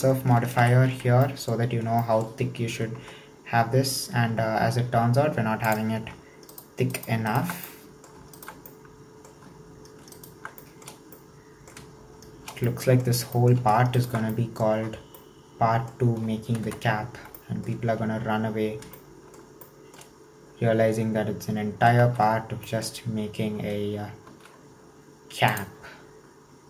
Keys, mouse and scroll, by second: 0.6 ctrl+3, 1.2-1.7 middle drag, 1.7-2.1 scroll up 3, 2.1 shift+middle click, 3.0 Tab, 3.4-5.7 scroll up 1, 5.7 click, 6.5 alt+shift+right click, 7.0 alt+shift+right click, 7.3 alt+shift+right click, 7.7 middle click, 8.4 alt+shift+right click, 8.7-10.2 middle drag, 10.2 alt+shift+right click, 10.6-14.0 shift+middle drag, 14.0 alt+shift+right click, 14.3 middle click, 15.0 scroll down 2, 15.2-16.7 middle drag, 16.7 KP_1, 17.4 shift+middle click, 17.7-18.9 scroll up 1, 18.9 alt+shift+middle click, 19.6 shift+middle click, 20.1-22.1 scroll up 2, 22.1 alt+z, 22.7-24.3 shift+middle drag, 24.3 alt+z, 25.5 click.